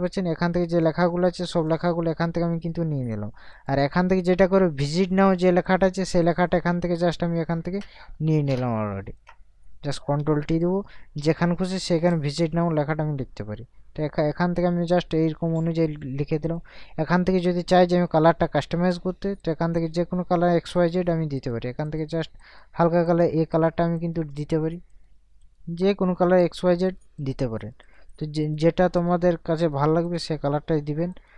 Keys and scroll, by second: 10.6 ctrl+t.